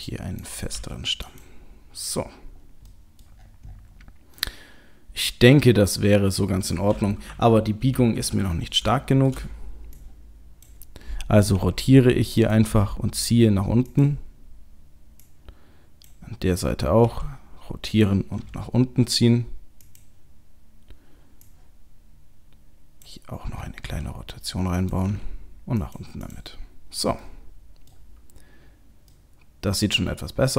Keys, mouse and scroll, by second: 0.4 click, 0.7 g, 2.2-2.6 scroll down 3, 2.6-3.1 scroll up 2, 2.9 middle click, 3.4-4.2 scroll down 8, 4.0 scroll up 2, 4.3 middle click, 6.7 middle click, 7.3 KP_3, 8.0 KP_1, 8.3 scroll up 2, 8.8-9.4 scroll up 7, 9.0 shift+middle click, 9.4-10.0 scroll down 3, 10.0 click, 12.5 r, 12.7 g, 15.2 click, 17.1 r, 18.4 g, 21.5 click, 23.9 r, 25.1 g, 26.3 click, 26.6-27.2 scroll down 1, 27.2 middle click, 27.2 scroll down 4, 27.9 middle click, 28.8 scroll up 1, 29.1 middle click, 30.2 middle click.